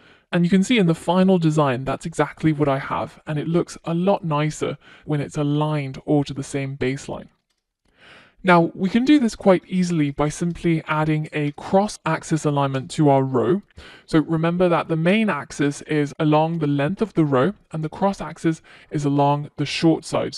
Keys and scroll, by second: 16.6 Return.